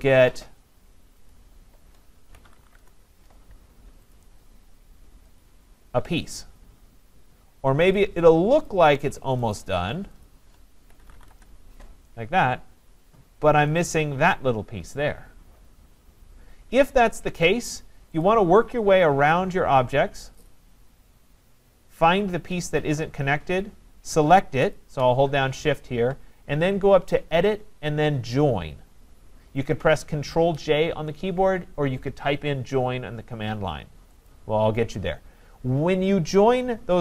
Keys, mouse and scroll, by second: 0.6-1.3 scroll down 4, 1.3 shift+click, 2.1 scroll, 2.1-3.1 typing, 3.6-4.1 scroll, 4.1 click, 5.1-5.4 scroll down 4, 5.4 click, 7.0-7.8 scroll, 8.0 shift+click, 8.7 click, 9.6 click, 10.2 click, 10.7-11.6 typing, 13.1-15.4 scroll, 15.3-16.1 typing, 15.6 scroll down 9, 17.0 scroll up 5, 18.2 click, 18.6 scroll up 3, 20.5 click, 20.5 scroll, 21.9-22.3 scroll, 24.7 shift+click, 27.4 click, 34.3-37.0 drag.